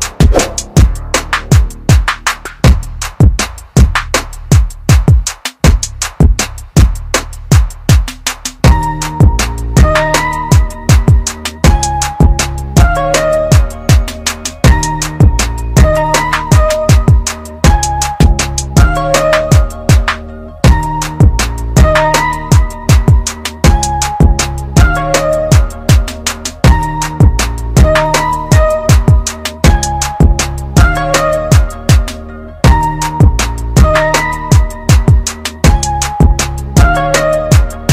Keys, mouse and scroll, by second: 2.0 ctrl+z, 3.3 typing, 3.9 ctrl+z, 11.1 click, 12.6 ctrl+z, 13.2 scroll up 1, 14.2 click, 14.6-15.3 scroll down 1, 17.2 click, 23.0 ctrl+z, 24.9 click, 29.8 ctrl+z, 30.4-30.9 scroll up 1, 30.9 click, 33.6 ctrl+z, 34.0 click, 37.3 ctrl+z.